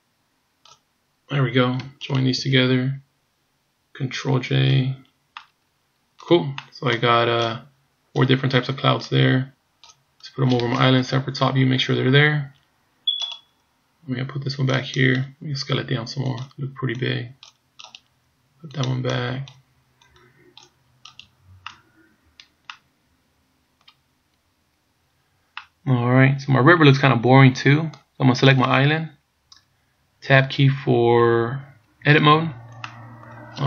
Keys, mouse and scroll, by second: 2.1 shift+right click, 4.6 ctrl+j, 5.4 middle click, 6.6 middle click, 7.4 click, 9.1 click, 11.0 KP_7, 13.3 right click, 14.7 click, 15.8 s, 17.0 click, 17.9 right click, 18.7 click, 20.1 click, 21.2 right click, 21.7 middle click, 22.7 middle click, 24.1 scroll up 1, 25.1-25.6 scroll down 1, 25.6 middle click, 28.5 right click, 32.3 Tab, 33.0 middle click.